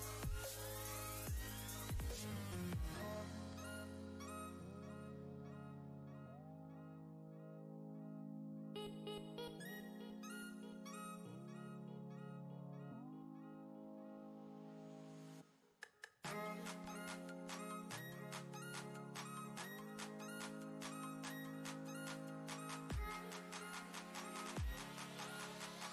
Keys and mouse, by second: 0.7-3.7 typing, 9.0 click, 11.3 Right, 12.5 r, 14.0 click, 14.4 ctrl+space, 14.6 ctrl+click, 14.9-16.8 ctrl+space, 19.2 ctrl+click, 19.6 ctrl+space, 21.1 click, 21.8 shift+click.